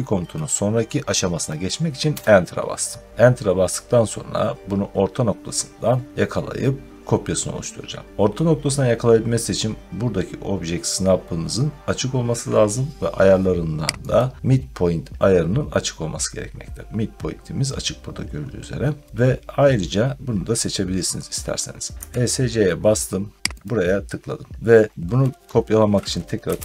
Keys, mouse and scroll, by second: 2.0 Return, 14.1 right click, 21.9 Escape, 23.5 click, 26.1-26.6 typing.